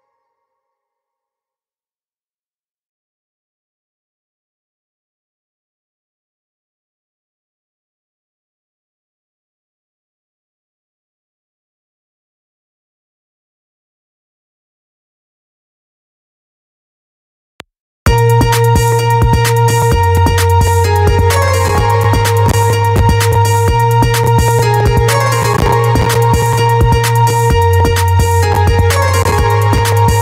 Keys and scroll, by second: 17.0 space.